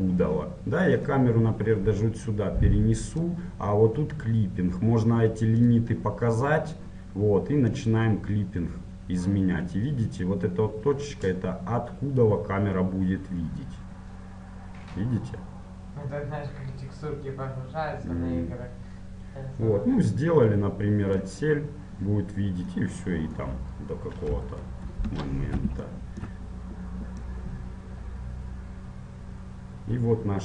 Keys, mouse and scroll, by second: 5.8-10.0 drag, 23.0-24.8 middle drag, 24.5 KP_1, 25.0 KP_3, 26.2-27.4 middle drag, 27.4-29.3 drag.